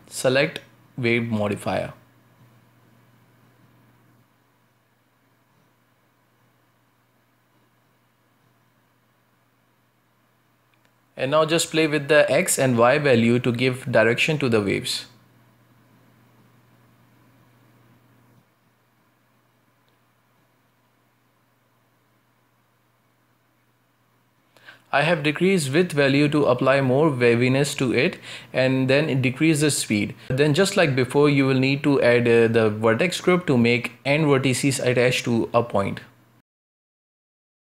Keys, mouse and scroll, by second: 1.2 ctrl+space, 2.4 Tab, 3.2 w, 5.5-6.7 drag, 8.1-9.0 drag, 9.0-10.0 middle drag, 10.0 z, 10.7 space, 12.2 space, 15.2-21.2 shift+drag, 21.2 space, 23.0 space, 25.4-27.4 shift+drag, 27.4 space, 28.6 space, 30.5-31.9 drag, 31.9 space, 32.6-34.1 shift+drag, 36.1-37.7 typing, 36.3-36.8 middle drag, 36.8 scroll up 1.